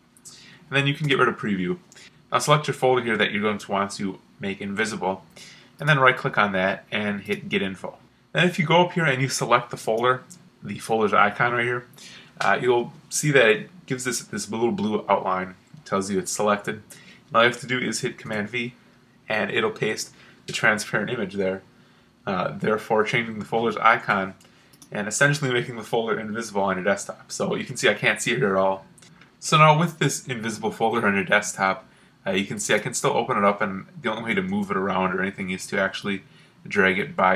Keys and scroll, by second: 1.0 super+q, 18.2 super+v.